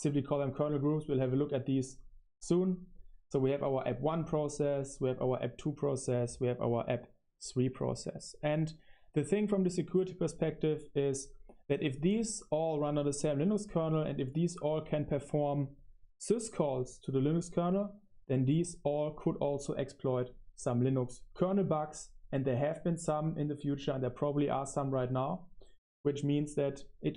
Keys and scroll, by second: 25.7 super+7, 26.9 Escape, 27.0-27.1 typing.